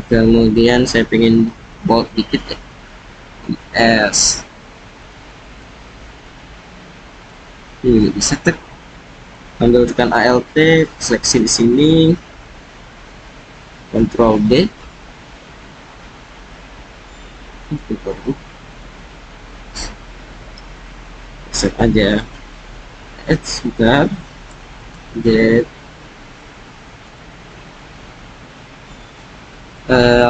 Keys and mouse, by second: 1.7 ctrl+b, 5.9-7.2 drag, 9.1 click, 14.2 ctrl+b, 18.6 click, 22.5 s, 24.4 g, 24.8 z, 26.3 click, 27.0 ctrl+b, 27.7 middle click, 27.9-29.7 drag, 30.1 middle drag.